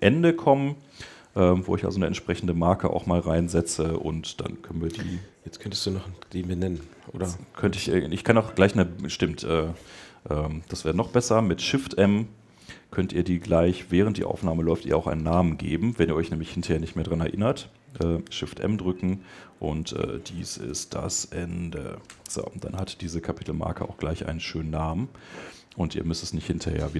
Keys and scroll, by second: 22.9 Return.